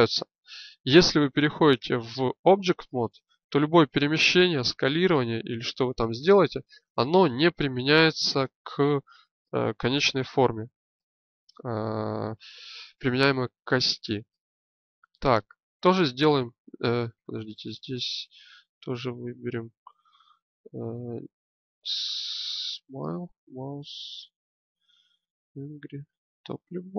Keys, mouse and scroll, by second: 1.8 Tab, 2.9-4.6 drag, 4.6 s, 7.1-9.3 drag, 15.8 right click, 16.3-17.3 drag, 17.3 right click, 17.9-21.6 drag.